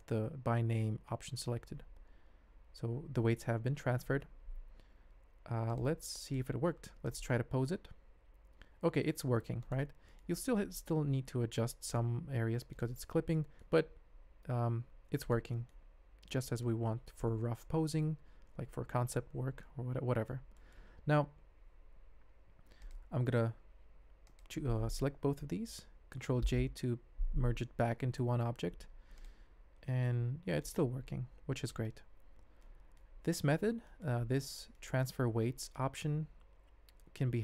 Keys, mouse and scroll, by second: 3.8 ctrl+Tab, 4.9 alt+a, 6.2 click, 7.0 click, 7.4 ctrl+Tab, 8.0 g, 11.0 r, 12.2 g, 13.3 drag, 13.8 g, 15.5 ctrl+click, 16.0 ctrl+Tab, 16.4 shift+click, 20.0 ctrl+middle click, 20.5 middle click, 22.8 click, 24.3 shift+click, 26.5 ctrl+j, 28.5 alt+a, 29.1 click, 29.5 ctrl+Tab, 29.9 g, 31.5 click, 31.8 ctrl+scroll down 1, 31.9 ctrl+Tab, 32.6-33.0 shift+drag, 33.2 middle drag, 36.0-37.2 middle drag.